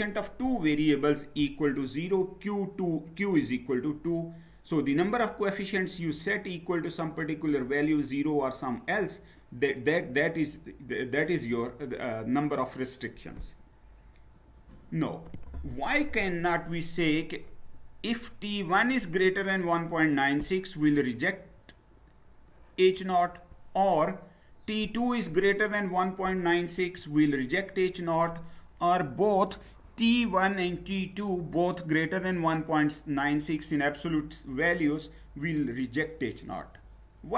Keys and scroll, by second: 14.4 Down.